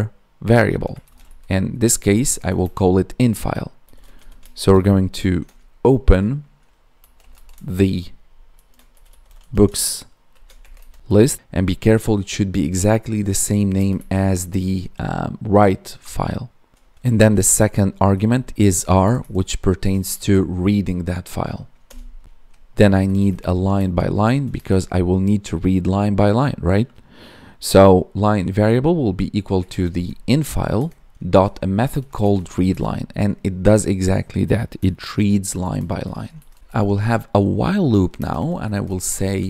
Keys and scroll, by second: 2.2 space, 2.5 space, 13.4 Right, 13.7 space, 13.9 Left, 18.7 ctrl+s, 18.9 Right, 20.1 Right, 22.2 ctrl+s, 23.7 space, 24.5 space, 30.7 Tab, 32.6 Tab, 36.3 ctrl+s, 38.1 space.